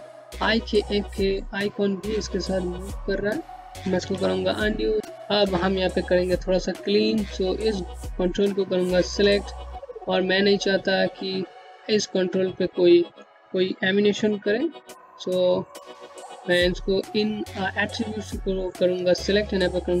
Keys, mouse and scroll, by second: 3.3 z, 4.8 click, 5.6 click, 13.4 click, 17.6 right click.